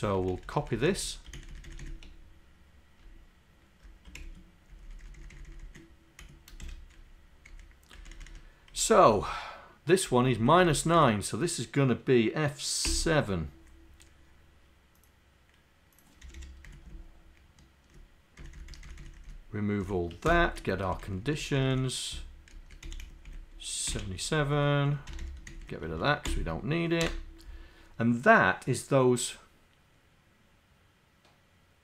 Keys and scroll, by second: 4.2 ctrl+Home, 4.7 Down, 5.4 Down, 7.5 Up, 8.3 Up, 9.0 Right, 10.1 Right, 10.8 Right, 16.7 Down, 18.4 shift+Down, 19.0 shift+Down, 19.9 shift+Up, 20.3 shift+Delete, 20.7 Up, 21.3 Up, 21.6 Down, 22.6 Up, 22.9 End, 23.9 Delete, 24.3 Down, 24.4 Down, 25.2 Home, 25.6 shift+Down, 26.3 Delete.